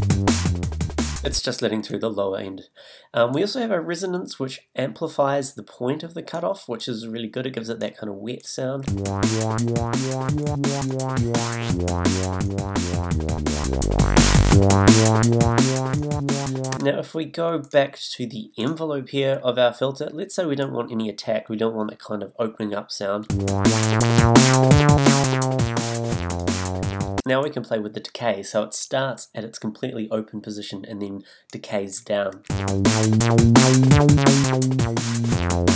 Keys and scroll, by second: 1.3 space, 8.8 space, 16.7 space, 23.3 space, 27.2 space, 32.5 space.